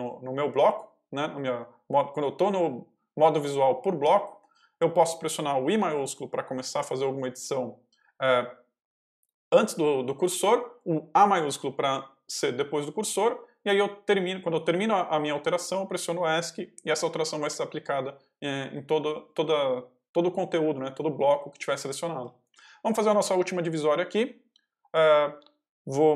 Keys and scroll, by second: 22.4 shift+a.